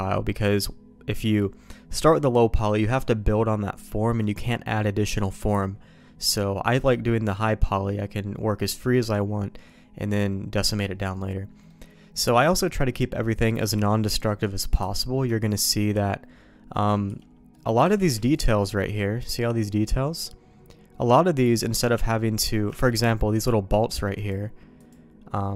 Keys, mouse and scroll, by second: 11.6 middle click, 14.2 middle click, 14.8 q, 17.5 middle click, 18.1 shift+q, 22.4 middle click, 22.7 shift+middle click.